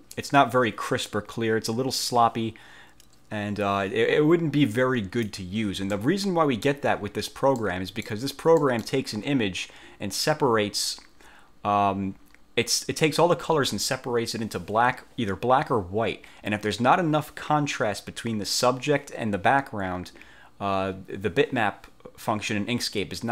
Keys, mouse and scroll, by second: 4.9 click, 6.1 middle click, 7.7 middle click, 8.8 middle click.